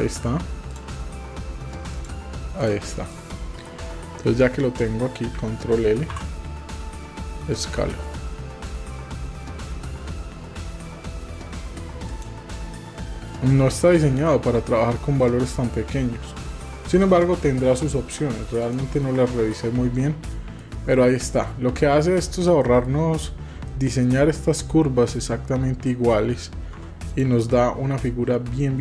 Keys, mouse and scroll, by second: 0.1 click, 1.9 click, 2.6 click, 3.1 middle click, 6.1 ctrl+l, 7.8 s, 13.9 shift+middle click, 14.7 middle click, 15.2 middle click, 15.7 shift+middle click, 18.6 click, 20.0 middle click, 20.9 middle click, 21.4 shift+middle click, 22.6 shift+middle click, 23.7 shift+middle click, 26.7 Tab, 27.1-28.4 drag.